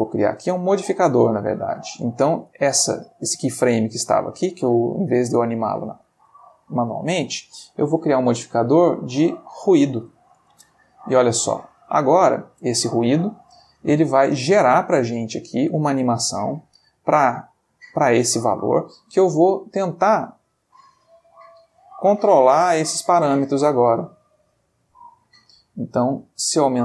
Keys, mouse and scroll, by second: 0.5 click, 2.8 g, 5.9 Escape, 7.7 click, 9.5 click, 10.4 space, 12.1 Escape, 14.2 click, 15.3-18.1 middle drag, 20.2-23.8 drag, 24.2-26.8 drag.